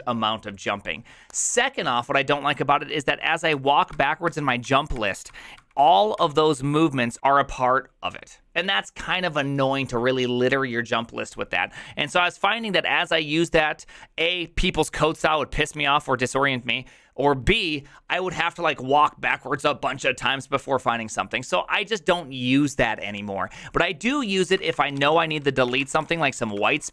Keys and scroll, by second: 3.0 ctrl+o, 3.5 ctrl+o, 3.9 ctrl+o, 4.2 ctrl+o, 4.6 ctrl+o, 4.9 ctrl+o, 5.2 ctrl+o, 5.5 ctrl+o, 5.8 ctrl+o, 6.1 ctrl+o, 7.1 ctrl+i, 24.3-26.9 typing.